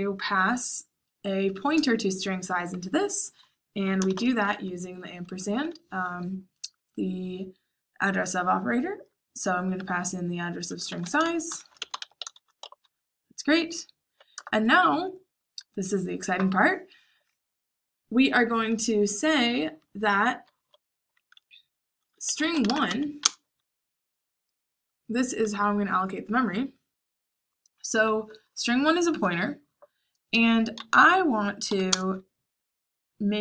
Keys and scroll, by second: 4.0 shift+7, 10.5-12.5 typing, 14.3 Return, 21.8-23.3 typing, 31.4-32.1 typing.